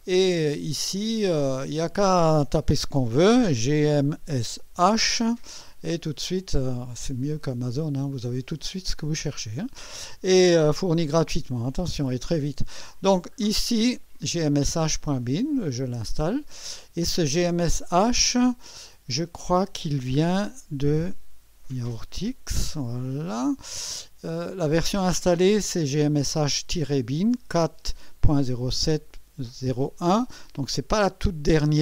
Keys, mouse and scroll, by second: 1.0 click, 3.4-4.7 typing, 18.6 click, 20.4 Up, 22.5 Return.